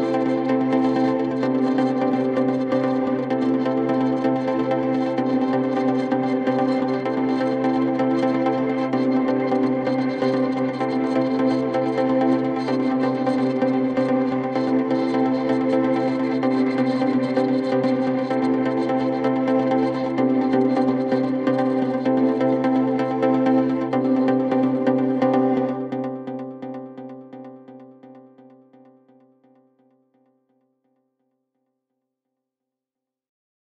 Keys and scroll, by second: 4.7 c, 5.2 Escape, 11.1 c, 11.7 w, 12.1 d, 13.6 shift+Page_Down, 14.5 f, 15.0 F3, 15.6 Escape, 16.7 shift+F2, 17.1 Escape, 17.7 F9, 27.1 shift+Page_Down, 27.7 Escape, 28.5 F4, 28.9 Escape, 30.6 Delete, 32.3 shift+F2, 32.9 Escape.